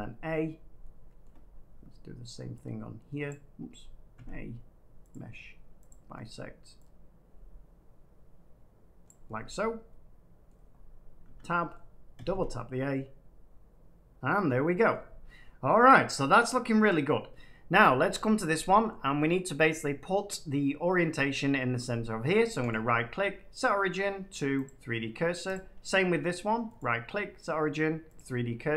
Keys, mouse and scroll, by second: 0.3 a, 1.1 shift+middle click, 3.2 click, 4.1 a, 5.0-6.7 drag, 9.0 click, 10.4 middle click, 10.6-11.2 scroll up 4, 11.2 Tab, 11.7 middle click, 12.1 typing, 14.8 middle click, 17.0 middle click, 17.7 click, 18.8 middle click, 22.6 right click, 24.6-26.3 drag, 26.7 right click, 28.1 click.